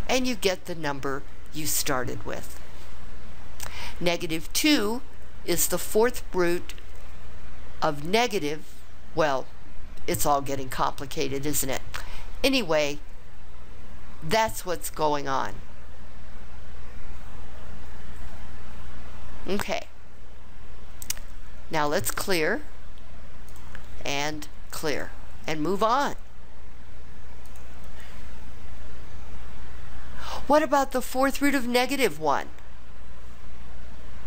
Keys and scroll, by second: 23.3-24.0 typing.